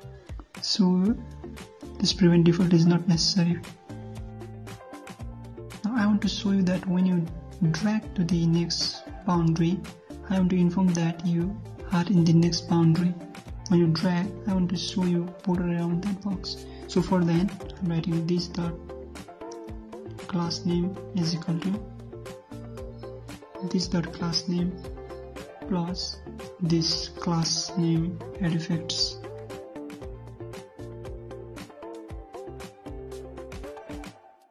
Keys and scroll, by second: 5.1 ctrl+shift+Left, 7.9 shift+Left, 8.0 alt+Tab, 13.1 alt+Tab, 32.1 ctrl+c.